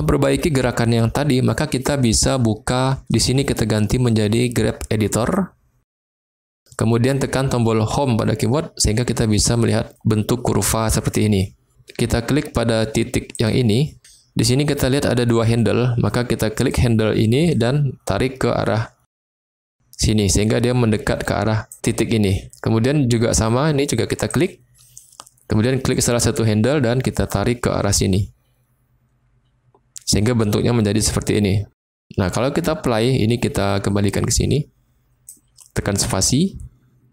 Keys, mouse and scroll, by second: 3.3-5.3 drag, 7.8 Home, 13.3 click, 16.5 click, 17.4-21.6 drag, 24.3 click, 25.9 click, 26.6-30.0 drag, 33.0-35.3 drag, 35.9 space.